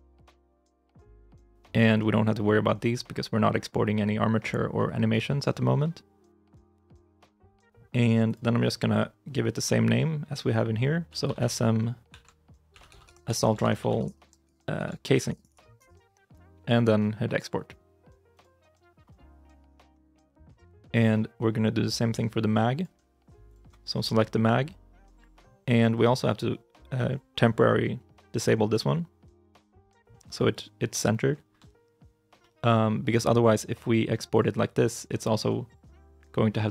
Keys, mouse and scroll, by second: 23.7-25.8 scroll down 1, 32.2 shift+i, 32.5-34.5 scroll down 1, 32.5 shift+m.